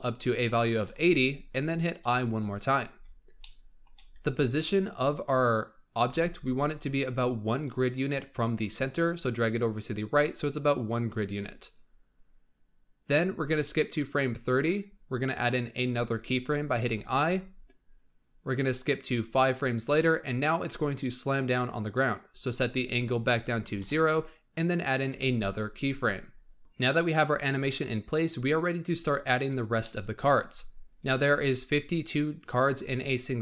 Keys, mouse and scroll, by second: 1.9 i, 3.3-4.1 shift+middle drag, 4.1-4.9 scroll down 2, 4.9-5.9 scroll up 1, 5.9 g, 13.9-16.8 drag, 16.8 i, 18.6-21.6 drag, 22.4-25.0 drag, 25.0 i, 28.8-29.7 scroll up 1, 29.7-30.6 shift+middle drag, 30.6-33.4 scroll up 3.